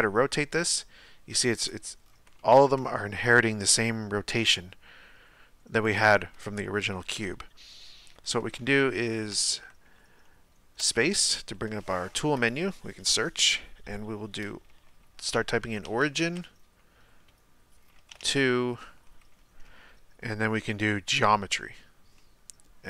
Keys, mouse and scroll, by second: 2.0-2.3 scroll down 1, 2.4-3.9 shift+middle drag, 3.9 r, 7.2 KP_Decimal, 22.2-22.8 middle drag.